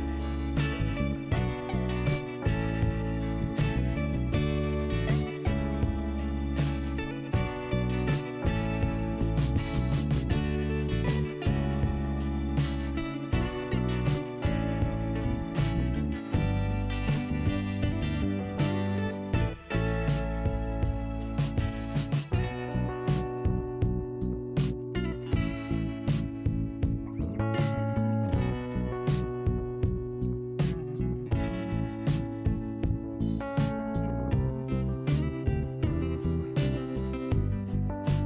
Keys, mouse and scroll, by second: 0.0 click, 1.7 click, 4.8 click, 5.0 click, 6.5 click, 7.5 click, 9.1 click, 12.3 click, 14.2 click, 15.4 scroll up 1, 16.3 click, 16.6 click, 16.6-17.0 scroll up 1, 17.0 click, 18.9 click, 20.6 click, 21.8 click, 22.9 scroll down 1, 23.5 click, 24.1 click, 24.1-24.6 scroll up 1, 25.1 scroll down 1, 26.8-27.2 scroll down 1, 27.3-27.9 scroll down 1, 27.9 scroll up 1, 29.0 click, 30.5 click, 31.7 click, 33.4 scroll down 1, 34.0-34.5 scroll down 1, 35.5 click, 35.6 click, 36.3 scroll down 1, 37.1 click, 37.2 click.